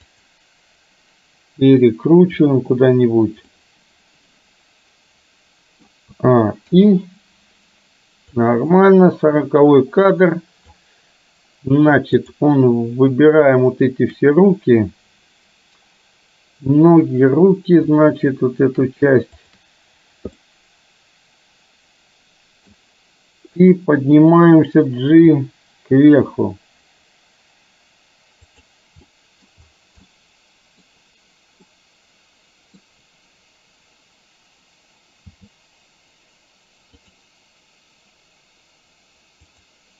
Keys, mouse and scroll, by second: 3.6-5.8 middle drag, 6.2 a, 6.7 i, 8.6-10.8 drag, 12.3 click, 19.3 shift+click, 20.5-22.7 middle drag, 25.1 g, 29.2 middle drag, 30.1 scroll up 1, 30.3-30.8 middle drag, 31.7-32.8 middle drag, 35.3 g.